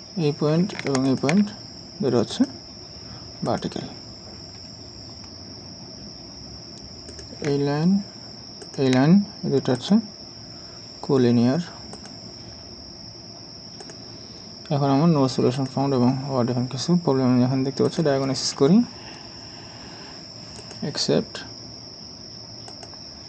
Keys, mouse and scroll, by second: 1.1 ctrl+click, 4.6-5.3 scroll down 1, 8.6 ctrl+click.